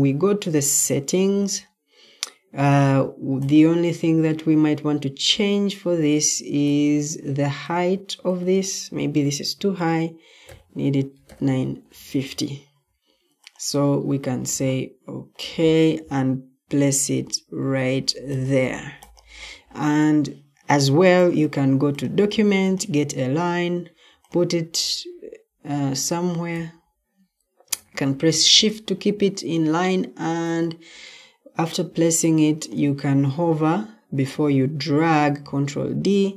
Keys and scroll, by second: 10.4-11.7 typing, 15.8-16.7 typing, 34.8 ctrl+d.